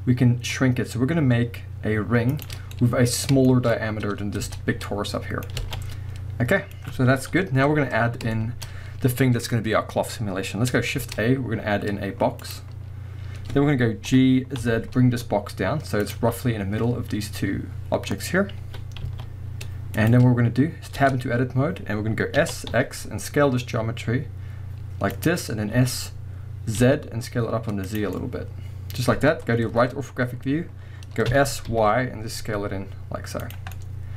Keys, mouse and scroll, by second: 2.4-2.7 shift+drag, 2.6-3.4 scroll down 2, 2.7-8.7 middle drag, 4.4 Tab, 4.6 scroll down 1, 5.6 alt+a, 7.3 KP_1, 8.0 scroll up 1, 8.7-11.0 scroll up 1, 11.0 shift+a, 14.1 g, 16.1 click, 16.2 z, 17.8-18.6 scroll up 1, 18.6 g, 20.1 click, 21.0 Tab, 22.4 s, 25.2 click, 25.7 s, 28.0 click, 28.2-30.6 middle drag, 29.7 KP_3, 30.4 scroll up 1, 31.3 s, 33.5 drag, 33.8 middle click.